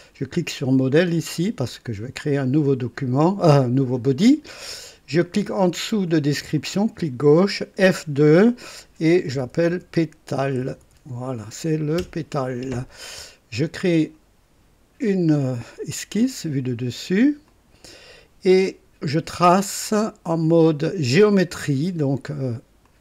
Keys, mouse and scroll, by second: 0.7 click, 2.4 click, 4.2 click, 6.5 click, 7.7 F2, 9.0-11.9 typing, 12.0 Return, 13.9 click, 16.2 click, 17.4 click, 22.8 click.